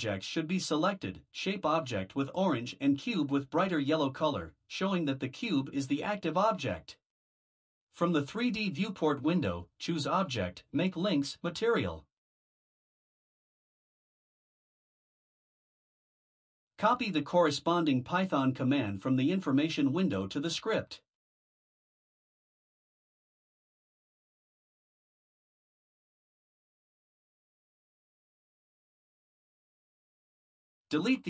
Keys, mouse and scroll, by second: 9.9 click, 17.8 click, 20.3 ctrl+c, 23.2 click, 25.0 Return, 26.7 ctrl+v, 28.7 BackSpace.